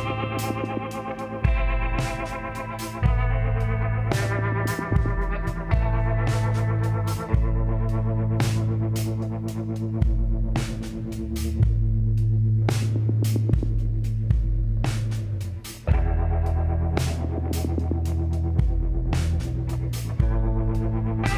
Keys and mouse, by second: 0.5 KP_1, 1.9 g, 4.4 z, 5.5 g, 5.6-7.6 middle drag, 8.5 s, 11.1-13.0 middle drag, 11.9 Tab, 13.0 s, 16.7-18.5 drag, 18.1 Tab, 18.5 middle click, 18.6 z.